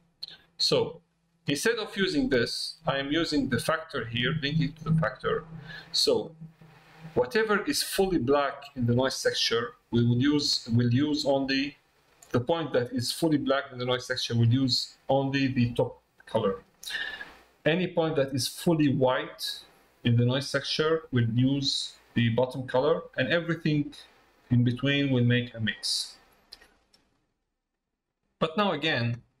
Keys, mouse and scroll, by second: 3.3-5.4 drag, 8.5 click, 27.1 middle click.